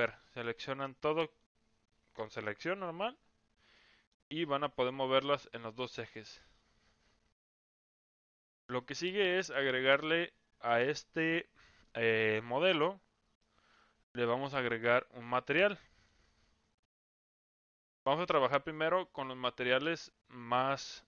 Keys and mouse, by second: 0.4-1.5 drag, 2.2-2.6 drag, 3.8 middle click, 4.8-5.8 drag, 6.2-7.4 drag, 8.6 middle click, 11.2-12.4 middle drag, 13.4 middle click, 14.5 middle click, 15.6 middle click, 16.4 Tab, 17.4-17.7 middle drag, 19.1 click.